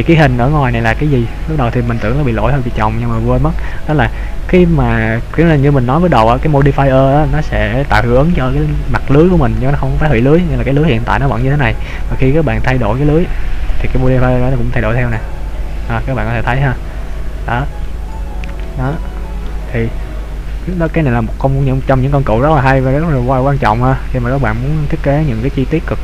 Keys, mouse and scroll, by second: 2.0 middle click, 4.3-5.2 scroll up 2, 5.6 middle click, 11.4 right click, 12.6 click, 15.1 click, 18.0 middle click, 19.0 middle click, 20.8 right click, 21.7 click, 23.2 click, 24.9 click.